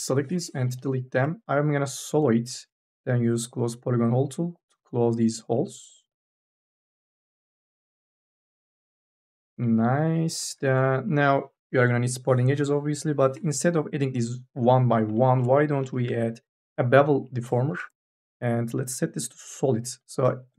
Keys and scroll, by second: 12.8 k, 13.1 l.